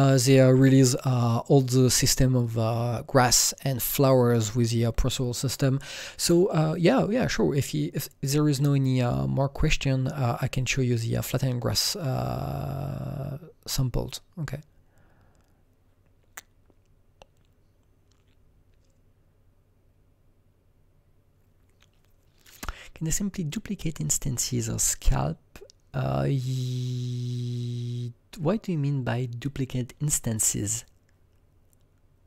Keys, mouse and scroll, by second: 0.0 click, 2.2 click.